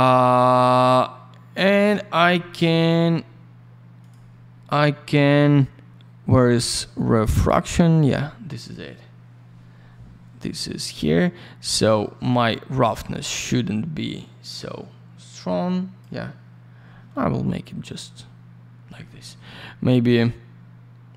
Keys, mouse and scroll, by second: 1.6 click, 1.7 click, 4.0 click, 4.1 click, 7.9 click, 12.3 click, 20.2 click.